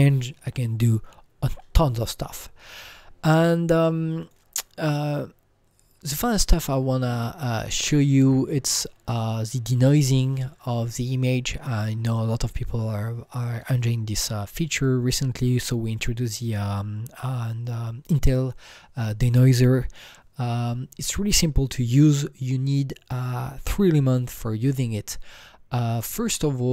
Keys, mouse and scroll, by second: 4.2 click, 4.2 KP_0, 4.2 KP_7, 4.2 click.